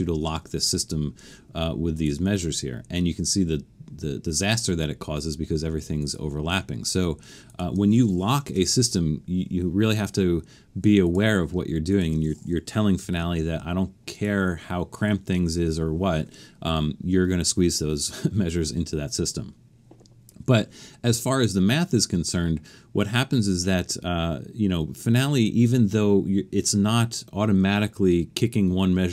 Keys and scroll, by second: 8.5 BackSpace, 13.0 shift+4.